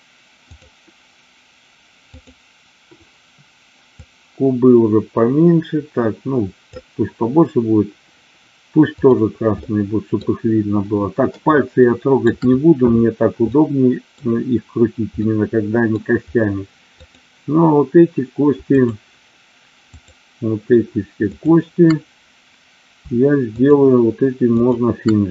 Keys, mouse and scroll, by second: 2.4 click, 3.9-6.6 drag, 8.9 click, 9.6 middle click, 11.9 shift+middle click, 13.5-14.0 middle drag, 15.2-15.9 middle drag, 16.8-18.3 drag, 21.2-22.5 shift+drag, 23.4-24.6 shift+drag.